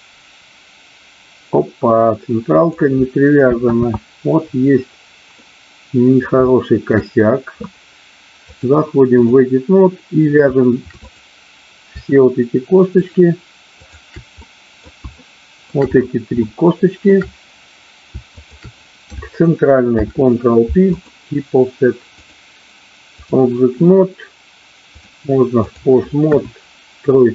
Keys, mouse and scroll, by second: 5.0 ctrl+z, 5.5 middle click, 6.5 shift+middle click, 8.5 click, 13.0 shift+click, 13.7 shift+click, 14.5 middle click, 15.1 shift+middle click, 16.5 shift+middle click, 18.3 shift+click, 20.0 ctrl+p, 22.2-23.3 drag, 24.8-25.8 drag, 26.2 KP_1.